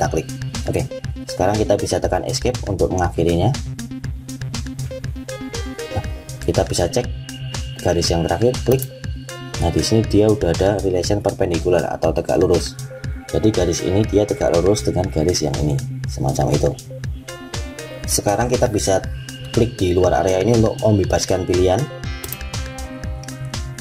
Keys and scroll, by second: 2.1 Escape.